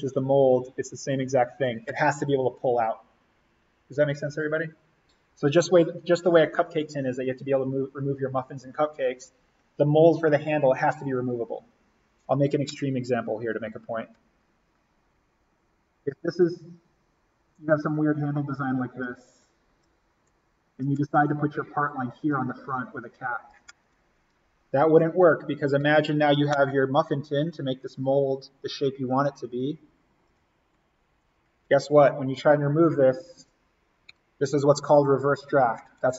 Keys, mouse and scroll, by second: 13.6 click, 25.8 click.